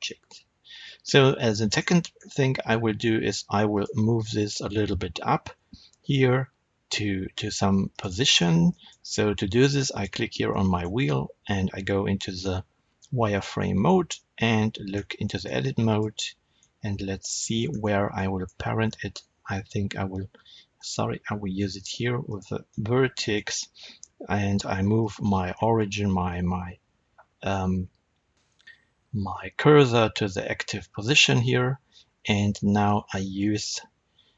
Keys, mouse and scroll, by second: 1.5-3.3 middle drag, 2.0-3.3 scroll up 2, 3.6 click, 5.2 g, 7.9 click, 8.2 scroll up 1, 8.6-9.8 shift+middle drag, 9.8 click, 10.4-15.8 middle drag, 12.2 z, 14.3 Tab, 14.8-15.1 scroll up 2, 15.8 click, 16.5 middle click, 17.6 scroll up 1, 18.0 middle click, 18.8 ctrl+Tab, 20.8 Escape, 21.6 1, 22.2 click, 22.6 middle click, 24.9-34.3 right drag, 28.5 shift+s, 32.0 Tab, 33.4 z.